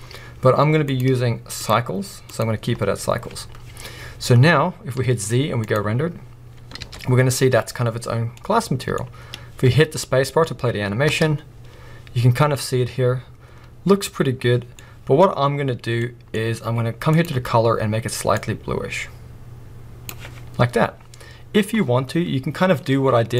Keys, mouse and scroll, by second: 2.5-9.6 drag, 3.8 scroll down 2, 4.2-4.9 scroll up 1, 5.9 z, 6.9 alt+a, 9.6-10.1 middle drag, 9.6 space, 11.1 space, 15.2-18.4 middle drag, 18.4 click.